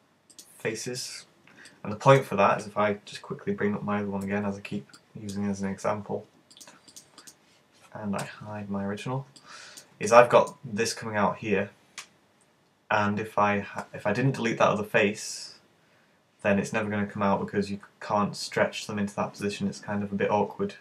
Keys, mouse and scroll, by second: 1.7 middle click, 4.3 `, 5.0 middle click, 7.4 click, 8.2 h, 9.4 right click, 10.1 middle click.